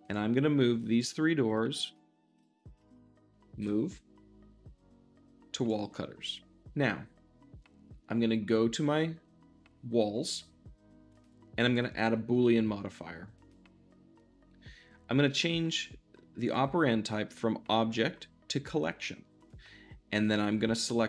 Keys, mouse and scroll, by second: 0.0-0.4 drag, 0.9-2.2 shift+drag, 2.3 shift+click, 2.7 shift+click, 3.5 m, 5.5-21.0 drag.